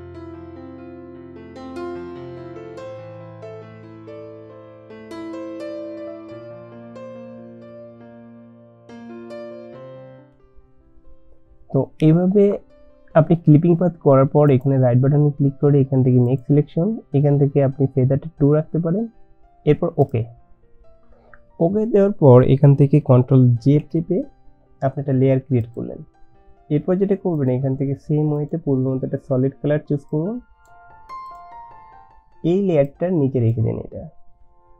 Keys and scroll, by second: 7.2 ctrl+z, 23.8 ctrl+j.